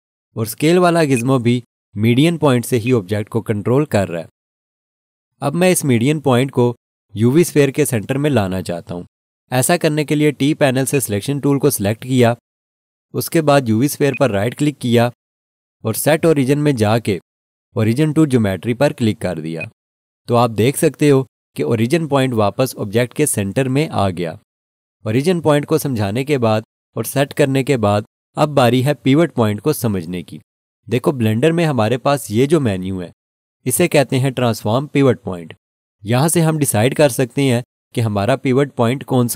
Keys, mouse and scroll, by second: 3.0 click, 10.9 click, 14.1 right click, 19.6 click, 33.9 click.